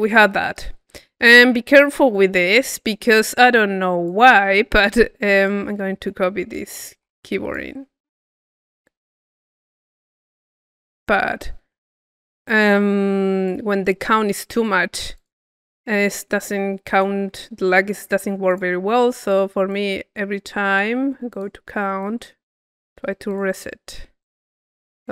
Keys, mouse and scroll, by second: 1.4 click, 1.9 middle click, 2.7-6.2 drag, 7.2 c, 9.0 c, 9.4 click, 10.5-11.6 drag, 11.6 middle click, 12.4-13.6 drag, 13.6 middle click, 14.2 click, 14.9 middle click, 15.2 click, 15.6 middle click, 16.9 click, 18.5 click, 19.3-20.9 drag, 21.3 click, 22.0-23.1 drag, 24.2 click, 24.4-25.1 drag.